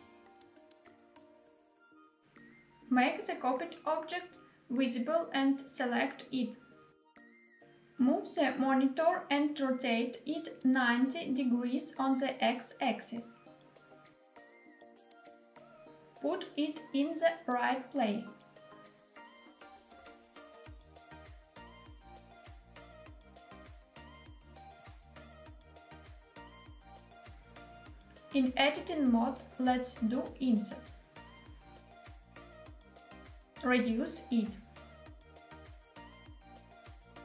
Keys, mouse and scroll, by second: 2.0 click, 4.3 click, 5.1 click, 7.4 g, 7.9 z, 10.1 click, 11.7 middle click, 11.8 r, 12.7 x, 13.3 9, 13.5 0, 14.9 click, 15.8 g, 16.3 y, 20.2 click, 21.0 scroll up 2, 21.4 shift+middle click, 21.7 scroll down 2, 21.8 g, 22.2 z, 24.9 click, 25.4-27.2 middle drag, 27.7 Tab, 29.3 click, 31.5 i, 32.8 click, 33.7 s, 36.8 click.